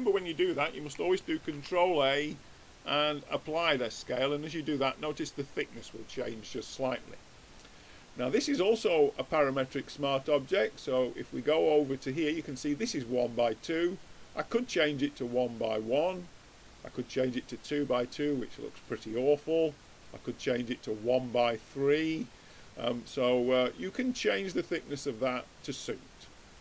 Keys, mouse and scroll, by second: 1.4 ctrl+a, 6.3-7.7 middle drag, 9.4-11.0 middle drag, 11.0-12.8 drag, 13.2-14.9 drag, 15.5-17.3 drag, 18.8-20.6 drag, 20.8-22.4 middle drag, 23.5-25.7 middle drag, 25.7-26.6 drag.